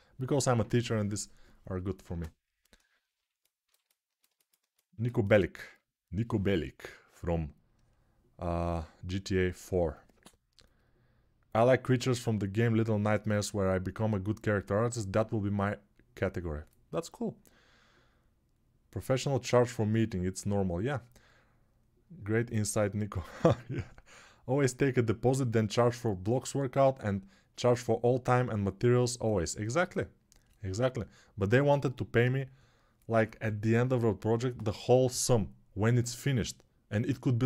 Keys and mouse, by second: 1.8 ctrl+space.